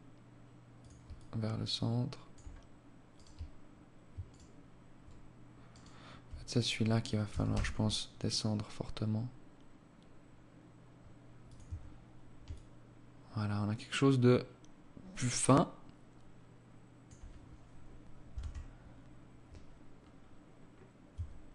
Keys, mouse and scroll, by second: 0.3 alt+click, 2.4 right click, 3.5 alt+shift+right click, 4.9 alt+right click, 6.5 g, 10.9 Tab, 11.7 alt+click, 17.5 KP_0, 19.2-20.0 scroll up 3, 20.4 Tab.